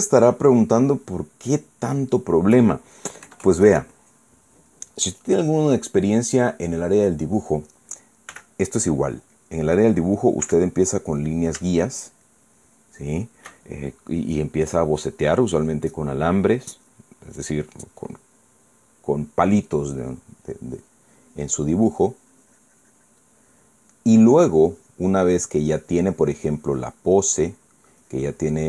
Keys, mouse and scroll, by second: 0.4-2.1 shift+middle drag, 2.5-3.1 shift+middle drag, 4.0 KP_Add, 9.0 f, 9.9 click, 11.2 f, 11.9 click, 12.5-13.5 shift+middle drag, 13.7 shift+middle click, 21.5-24.1 drag, 25.0 click, 26.2-27.9 drag, 28.0 click.